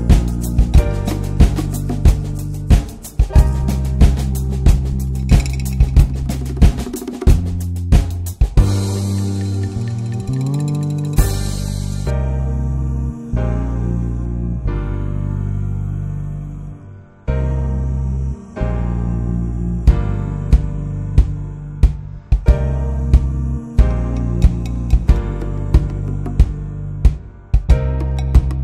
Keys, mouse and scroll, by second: 0.1-0.9 middle drag, 0.9 scroll up 1, 1.1 scroll down 2, 1.3 middle drag, 1.6 click, 2.1-2.7 scroll up 1, 2.7 shift+click, 3.2 shift+click, 4.3 ctrl+l, 4.7 click, 4.9 middle click, 5.1-5.8 scroll up 1, 5.8-12.0 drag, 13.7-14.5 drag, 18.2-18.8 middle drag, 18.8 scroll up 2, 19.0-20.1 middle drag, 20.1-20.9 scroll up 3, 20.2-20.6 shift+middle drag, 20.9-21.6 shift+middle drag, 21.6-22.0 drag, 24.5-28.6 drag.